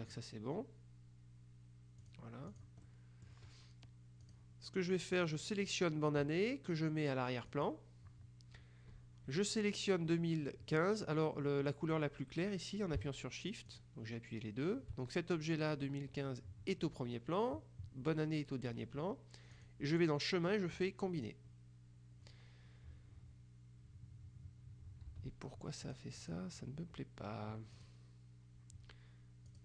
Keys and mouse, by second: 2.1 click, 4.3 click, 5.3 click, 7.6 click, 13.8 shift+click, 19.7 click, 21.3 click, 25.1 ctrl+z, 25.9 click, 27.8 click, 29.5-29.6 drag.